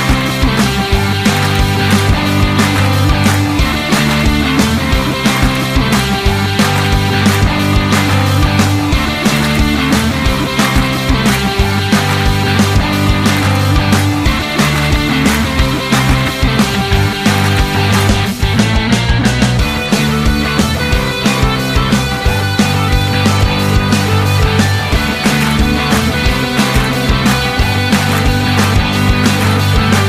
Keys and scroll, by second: 17.3 ctrl+d, 25.1 ctrl+d.